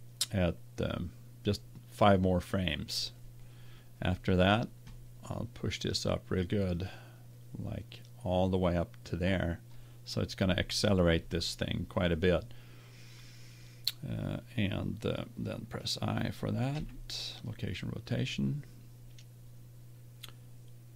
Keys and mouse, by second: 0.7-3.0 drag, 6.7-8.6 drag, 16.7 i.